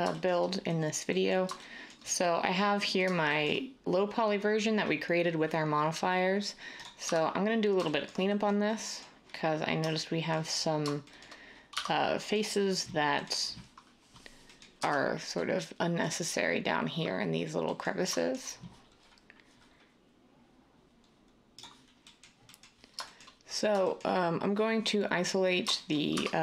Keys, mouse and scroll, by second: 21.7 s, 26.1 Tab.